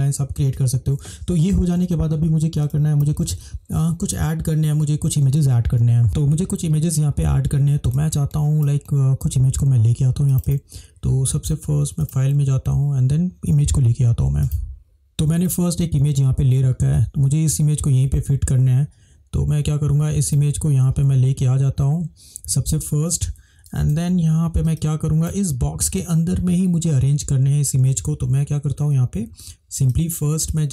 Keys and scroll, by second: 1.8 ctrl+=, 3.4 space, 6.0 space, 24.0 ctrl+=.